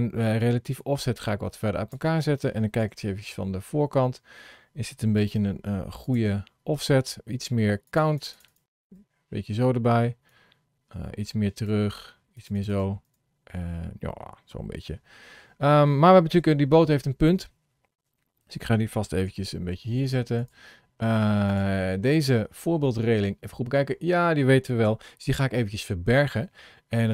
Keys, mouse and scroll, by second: 0.2 click, 2.6 KP_1, 3.6-4.2 scroll down 5, 5.0 g, 6.2-6.6 scroll up 2, 7.6 click, 8.1 click, 8.3 click, 8.7 click, 10.1 click, 12.3 click, 12.5 click, 12.7 click, 12.9 click, 13.4 scroll down 1, 16.1 KP_7, 17.1 scroll down 1, 17.9 shift+middle click, 19.1 g, 21.3 click, 21.8 middle click.